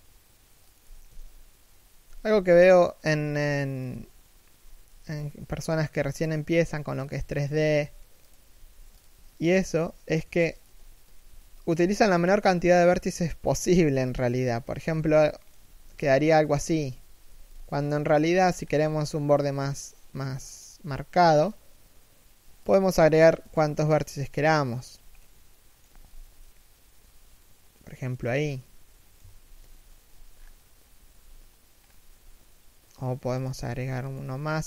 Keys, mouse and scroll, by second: 2.4 alt+right click, 2.9 g, 5.9 alt+right click, 6.2 g, 7.1 alt+right click, 7.4 g, 9.1 alt+right click, 9.3 s, 14.3-18.3 typing, 14.8 middle click, 17.2 middle click, 18.0-18.3 scroll up 1, 19.7 k, 24.8 middle click, 25.7 z, 26.1 middle click, 27.8 z, 28.2 middle click, 28.9 3, 29.2 1, 30.0-30.4 scroll down 1, 30.7-31.2 scroll up 1, 31.2 scroll down 1, 31.4 scroll up 1, 32.8 k.